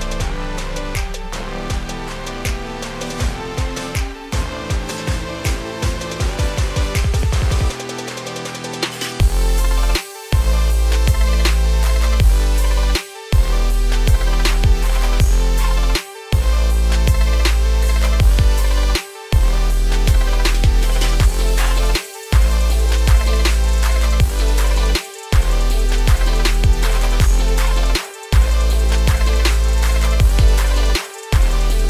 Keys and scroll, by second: 3.6 ctrl+z, 15.8 ctrl+space.